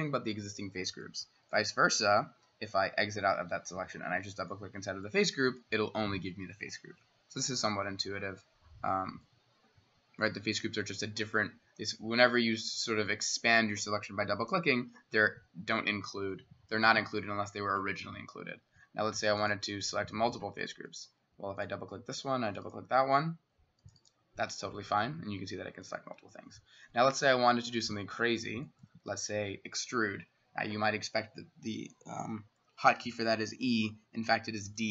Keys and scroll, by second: 1.0 typing, 2.3 Escape, 3.2 s, 19.9 Escape, 20.4 s, 34.7 d.